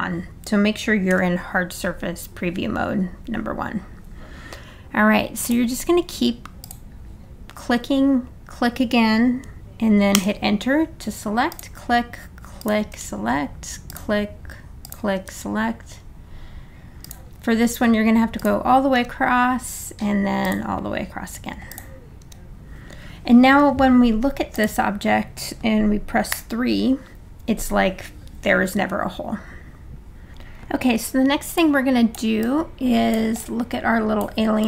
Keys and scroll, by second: 1.1 1, 2.5 1, 10.2 Return, 12.9 Return, 15.2 Return, 19.0 Return, 20.3 Return, 22.2 Return, 26.3 3.